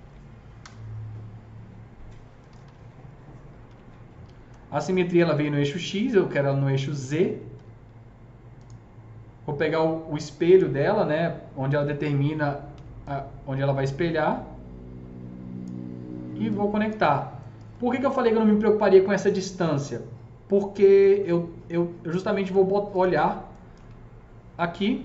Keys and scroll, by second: 0.0-0.1 typing, 0.4 Return, 2.4-4.0 typing, 7.5 w, 12.6 s.